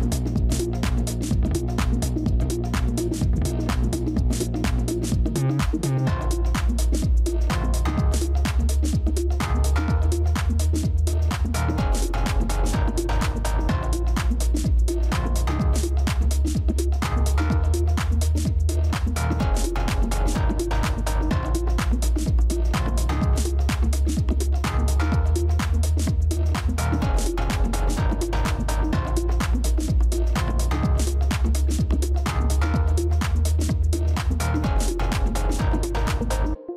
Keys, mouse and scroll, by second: 10.9-12.9 scroll down 1.